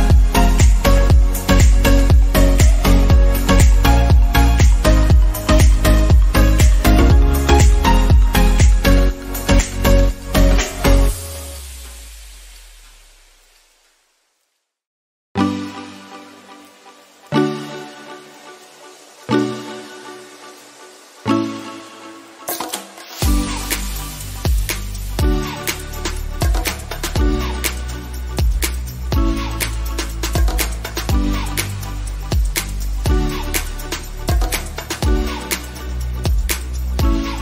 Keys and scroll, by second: 8.6 ctrl+0, 11.5 ctrl++, 35.3 ctrl+d.